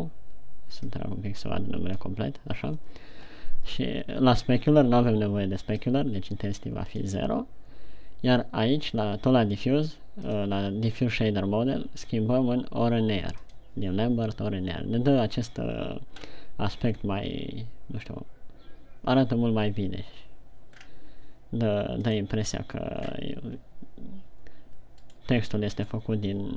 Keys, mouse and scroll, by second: 1.5 click, 6.2 click, 10.6 click, 16.5-18.2 scroll up 2, 21.2-22.6 scroll down 3.